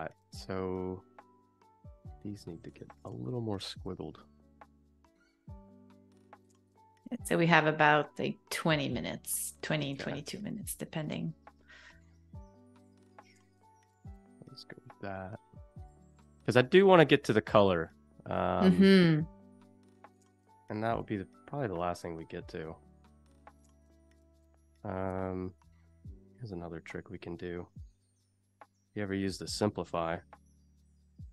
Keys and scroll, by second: 22.6 space, 23.7 z, 24.6 a, 25.2 space, 26.1 v, 30.0 q.